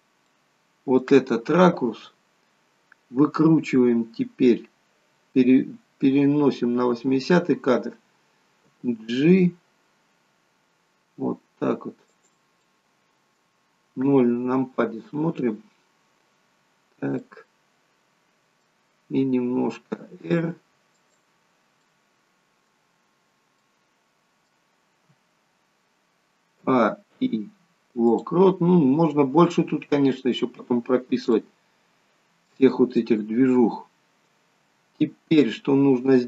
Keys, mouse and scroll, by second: 0.2 middle click, 6.1 click, 8.7 g, 12.5 middle click, 14.0 KP_0, 15.1 KP_0, 16.7 scroll down 2, 17.1 middle click, 19.5 r, 21.8 middle click, 22.7-23.4 scroll down 9, 23.6 middle click, 26.5 a, 27.0 i, 30.3 scroll up 5, 31.2 shift+middle click, 32.9 middle click.